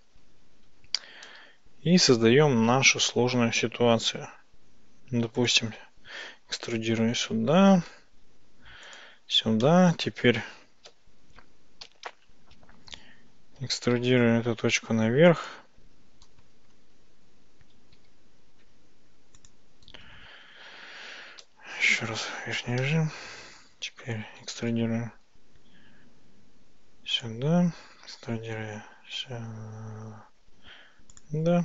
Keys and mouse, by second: 1.3 e, 5.4 ctrl+click, 7.2 e, 8.9 ctrl+click, 9.7 middle click, 11.3 `, 11.9 `, 14.0 e, 15.5 ctrl+click, 16.6 ctrl+z, 18.0 e, 19.4 ctrl+click, 24.5 e, 27.2 ctrl+click, 28.1 e, 31.2 ctrl+click.